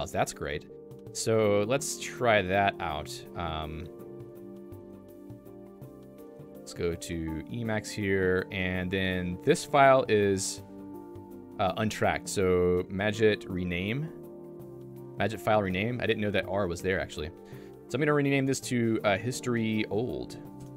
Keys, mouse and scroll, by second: 7.4 Return.